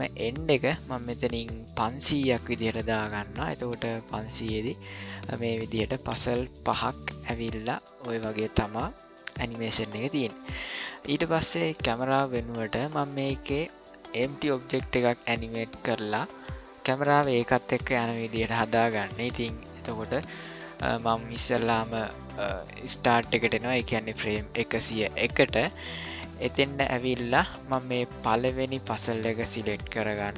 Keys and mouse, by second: 0.1-3.0 drag, 22.9 click, 29.3-30.3 shift+middle drag.